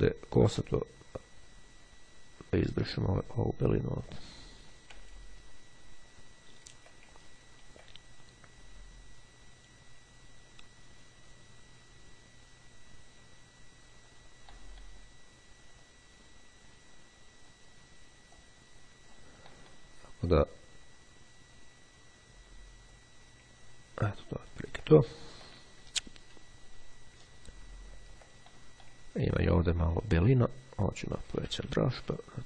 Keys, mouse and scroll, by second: 5.1-6.1 ctrl+scroll down 2, 6.6-7.1 ctrl+scroll up 2, 7.3-8.1 ctrl+scroll up 3, 8.6-14.7 drag, 15.9-18.1 drag, 18.5-19.7 drag, 20.6-23.5 drag, 23.7-25.1 ctrl+scroll down 2, 25.3-25.8 ctrl+scroll down 3, 27.5-28.3 ctrl+scroll up 2, 28.3 ctrl+scroll up 1, 28.6 ctrl+click, 29.1-30.0 ctrl+scroll up 1, 31.3 ], 32.1-32.4 drag.